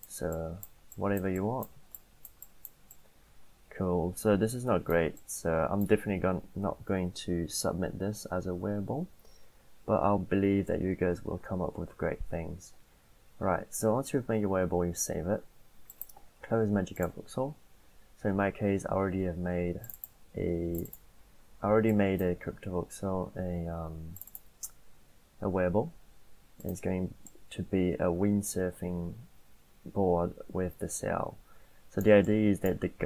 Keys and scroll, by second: 6.7 ctrl+a, 8.6 Delete.